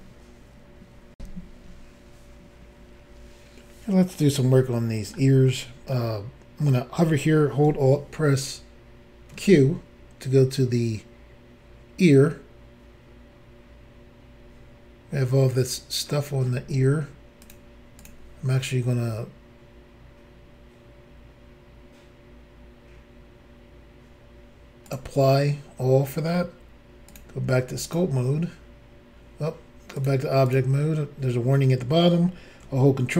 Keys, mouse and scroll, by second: 1.1 Pause, 2.5 Insert, 4.6 shift+middle click, 5.5 middle click, 9.3 alt+q, 17.4 click, 17.5 click, 18.0 click, 24.9 click, 27.1 click, 27.9 click, 30.0 click, 30.5 click.